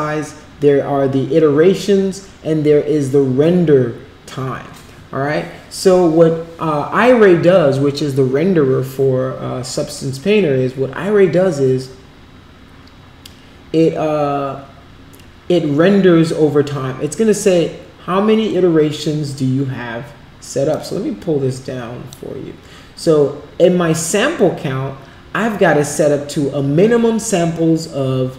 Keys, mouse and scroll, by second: 20.7-22.1 drag.